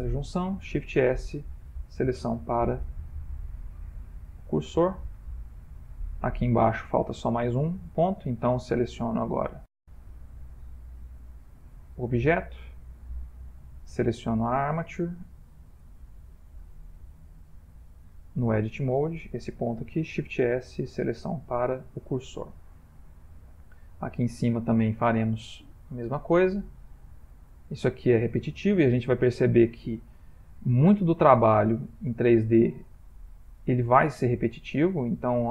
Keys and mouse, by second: 0.5 shift+s, 2.9-3.5 middle click, 3.3 middle click, 4.5 ctrl+middle click, 4.7 ctrl+middle click, 5.3 middle click, 5.4 ctrl+middle click, 6.2 ctrl+middle click, 6.3 middle click, 9.2 Tab, 9.7 click, 11.0 shift+s, 12.8 Tab, 13.5 Tab, 13.9 click, 14.7 Tab, 15.4 Tab, 15.9 middle click, 18.0 Tab, 18.6 click, 20.1 shift+s, 22.2 middle click, 23.4 shift+middle click, 24.7 middle click, 25.8 middle click, 26.1 shift+middle click, 27.5 Tab, 27.9 click, 29.3 shift+s, 32.8 click, 33.2 Tab, 34.2 click, 35.0 middle click.